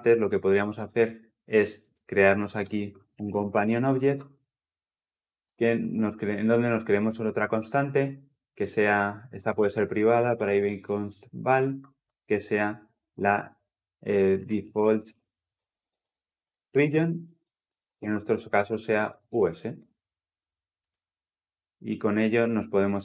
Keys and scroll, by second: 3.9 Return, 12.2 Tab.